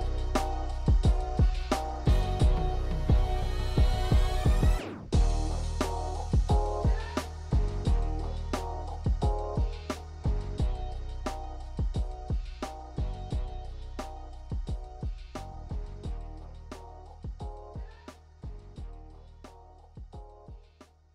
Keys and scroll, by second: 4.6 ctrl+z.